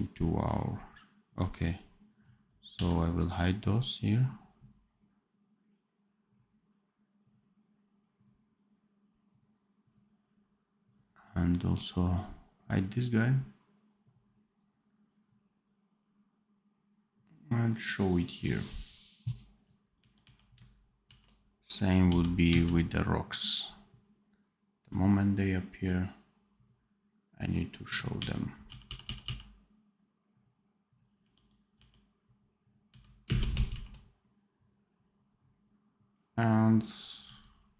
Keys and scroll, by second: 2.6 v, 19.9 r, 21.0 ctrl+b, 22.0 d, 28.1 r, 28.6 f, 29.2 f, 31.1 r, 32.8 d, 33.2 space, 33.6 ctrl+b, 37.1 d.